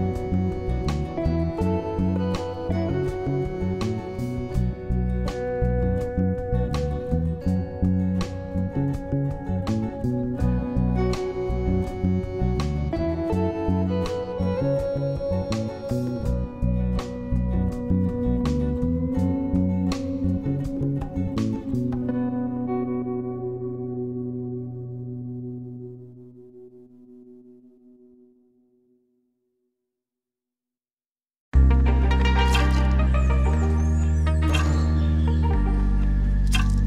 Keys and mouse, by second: 2.2-5.4 drag, 7.3 click, 9.9 click, 11.2 click, 12.6-13.7 drag, 15.5-19.2 drag, 22.7-25.1 drag, 26.1-29.5 drag, 30.7 click, 31.8 click, 32.8-33.8 drag, 34.7-36.8 drag.